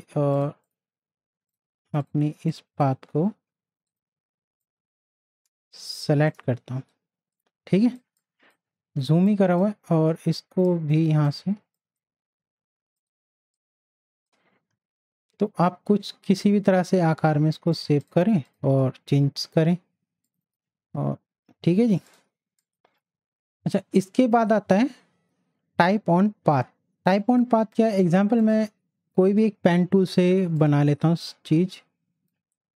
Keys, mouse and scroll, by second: 0.3-7.0 drag, 7.0 space, 7.3 click, 7.5 space, 8.2 click, 8.3 space, 9.3-18.0 drag, 22.1 click, 23.6 right click, 27.8 right click, 28.4 click, 30.5-32.7 drag.